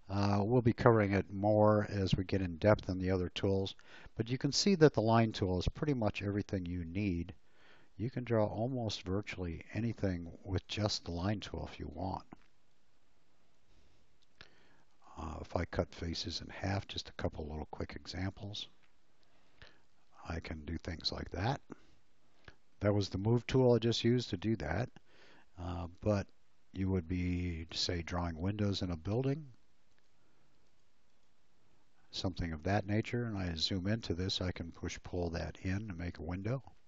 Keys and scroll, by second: 6.1 l, 11.0 space, 12.2 p, 15.0 l, 17.5 space, 19.3 m, 23.1 space, 25.8 l, 32.3 space, 35.1 p.